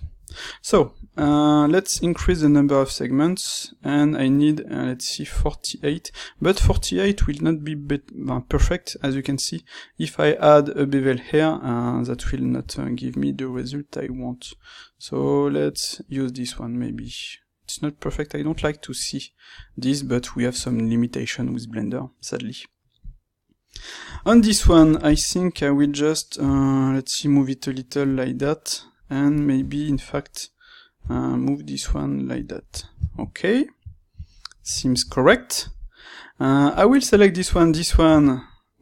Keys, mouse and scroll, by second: 0.0 shift+middle click, 0.6 click, 1.9 space, 6.3-24.1 middle drag, 24.1 Tab, 24.7 click, 26.4 g, 29.2 click, 30.0 ctrl+right click, 31.0 g, 32.3 click, 32.7 Tab, 33.0-36.6 ctrl+middle drag, 36.6 click, 37.4 shift+click.